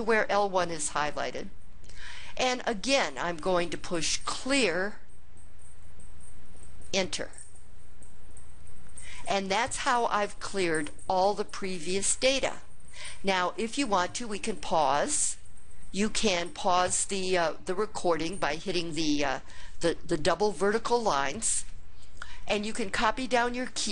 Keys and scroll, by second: 6.6 Return.